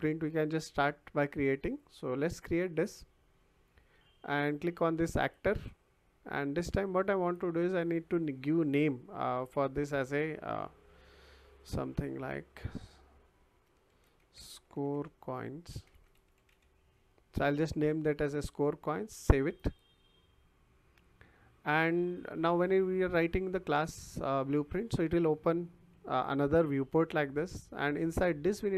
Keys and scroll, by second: 13.6-17.0 typing.